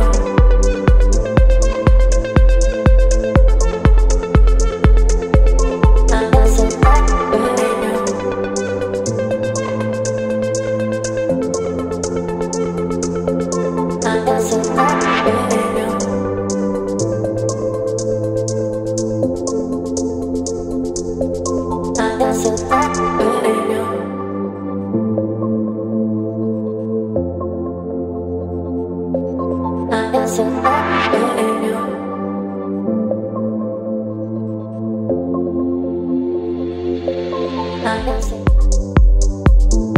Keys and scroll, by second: 2.6 Down, 2.8 Down, 2.9 Down, 4.0 space, 6.2 space, 17.5 v, 18.4 space, 31.6 space.